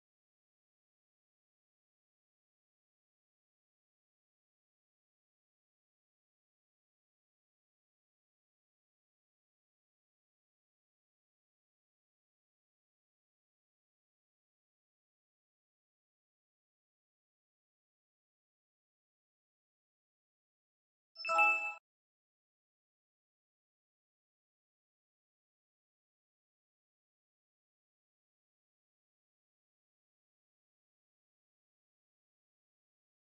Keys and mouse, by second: 12.0-13.9 middle drag, 15.8 click, 16.8-18.2 middle drag, 19.4-20.7 drag, 25.5 middle click, 25.8-27.3 middle drag, 27.9 click, 28.8 middle click, 29.6-32.0 middle drag.